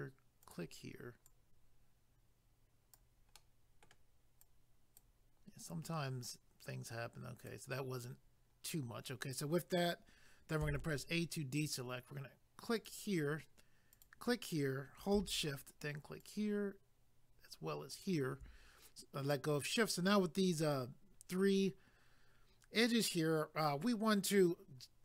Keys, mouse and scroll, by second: 0.4 click, 1.3 click, 3.4 middle click, 10.6 a, 12.8 click, 13.9 click, 16.2 shift+click, 17.9 shift+click.